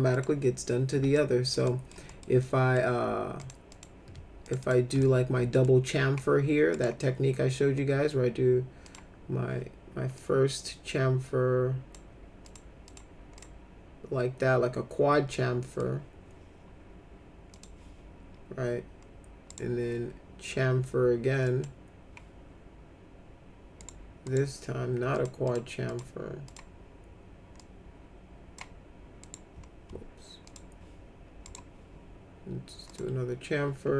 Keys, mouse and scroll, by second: 0.1 click, 1.2 alt+middle click, 1.6 middle click, 2.0 middle click, 2.4 middle click, 3.4 click, 3.7 click, 4.4 ctrl+click, 4.6 ctrl+click, 5.0 alt+middle click, 6.7 right click, 8.8 click, 10.2-11.9 drag, 12.5 click, 12.8 click, 13.3 click, 15.3 alt+middle click, 17.5 click, 19.5 right click, 21.5 click, 23.8 right click, 24.2 right click, 25.1 click, 25.4 click, 25.9 click, 26.5 click, 27.5 click, 29.2 right click, 30.5 click, 31.4 right click, 32.8 click.